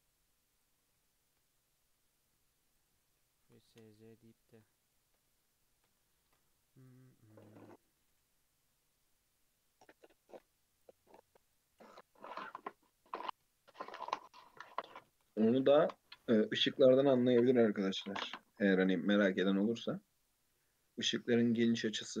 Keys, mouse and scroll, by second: 1.0-2.2 shift+middle drag, 2.2 click, 2.9 s, 4.4-6.2 shift+middle drag, 6.2 ctrl+r, 7.7 click, 8.0 g, 10.3 ctrl+r, 11.4 click, 11.7 g, 14.0 click, 14.7 s, 16.2 2, 16.7-17.0 shift+middle drag, 17.0 e, 18.7 1, 18.9 click, 19.2 g, 20.5 2, 20.6 click, 21.3 shift+middle click, 22.1 e.